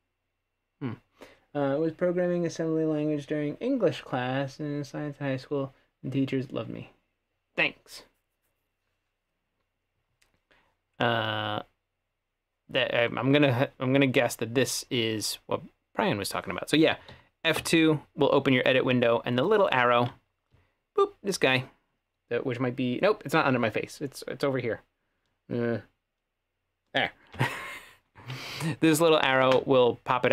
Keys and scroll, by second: 17.2 F2, 17.6 F2.